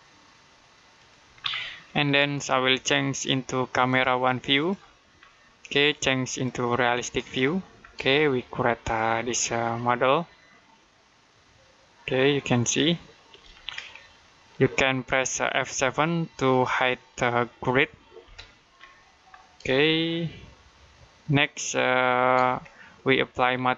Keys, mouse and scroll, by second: 0.8 click, 1.2-1.7 scroll down 1, 1.7 middle click, 2.9 click, 5.0-6.1 scroll down 1, 6.1 click, 7.6 scroll down 1, 8.0 shift+middle click, 13.3-13.9 scroll up 1, 13.9 middle click, 18.1 F7, 19.1 scroll down 1, 19.7 shift+middle click, 22.4-22.8 scroll up 1, 23.0 middle click.